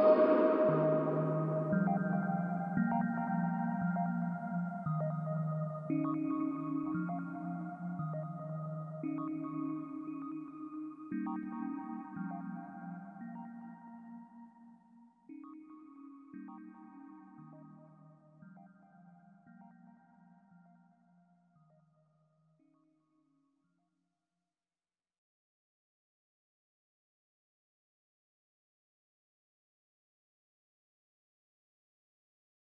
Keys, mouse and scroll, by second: 0.7-2.8 drag, 1.3-2.8 scroll up 2, 2.8-14.6 middle drag, 14.6 click, 16.3-18.2 drag, 25.6 click, 26.9 click, 27.9 click, 29.6 click.